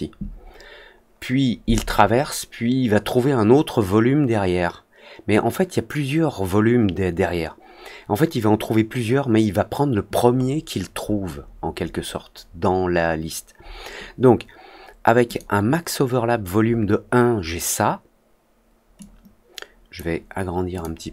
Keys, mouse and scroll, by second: 10.3 middle click, 10.9 middle click, 11.3 middle click, 11.7 middle click, 15.2 click, 18.9 click, 20.7 click, 21.0 middle click, 21.0 scroll up 1.